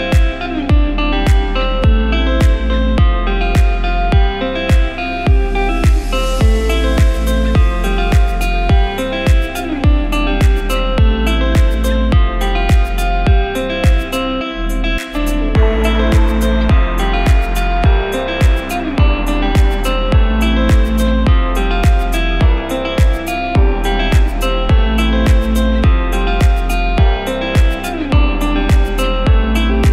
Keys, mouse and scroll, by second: 0.3 click, 2.0 click, 2.9 Tab, 3.7 scroll up 1, 4.4 click, 5.4 s, 8.7 click, 10.1 KP_1, 10.6-11.2 scroll down 8, 11.2-11.7 scroll up 8, 12.0 s, 16.1 click, 17.8 s, 20.4 click, 26.1 click, 27.4 KP_1, 28.5 click, 29.7 click.